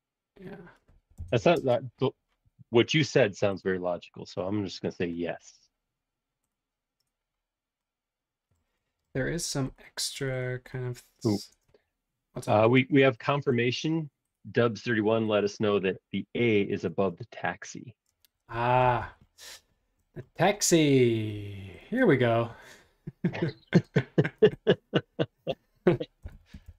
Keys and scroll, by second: 1.1 Return, 1.5 space, 1.7 Escape, 11.4 super+Tab, 16.9 super+Tab, 18.1 super+space, 18.3 ⟲, 18.9 space, 19.1 ⟲, 26.0-26.7 typing.